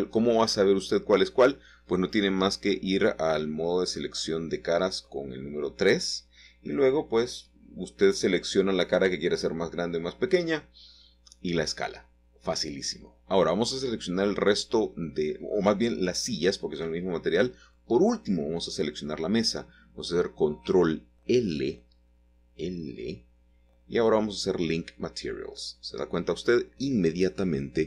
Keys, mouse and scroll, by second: 1.2-2.6 middle drag, 5.5 click, 6.2-6.9 scroll down 1, 6.3 shift+middle click, 7.5 click, 8.4-9.5 middle drag, 9.9 shift+click, 11.0 shift+click, 11.6-13.4 shift+drag, 16.4 shift+click, 23.3 click, 24.7-25.9 middle drag, 26.5-27.8 middle drag.